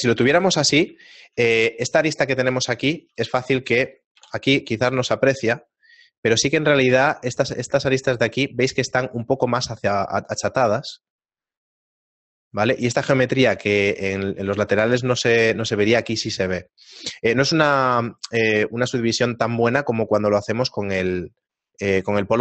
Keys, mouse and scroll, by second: 1.1 shift+middle click, 2.1 right click, 3.1 a, 3.5 shift+middle click, 4.2 KP_7, 5.6-6.2 scroll up 5, 6.9 middle click, 6.9 scroll up 1, 10.8 middle click, 13.3-14.1 scroll up 1, 14.2 middle click, 15.1-15.5 scroll down 3, 15.5 middle click, 16.5 middle click, 16.9-17.4 scroll down 2, 17.5 Tab, 18.9 Tab, 18.9 shift+middle click, 19.3 shift+middle click.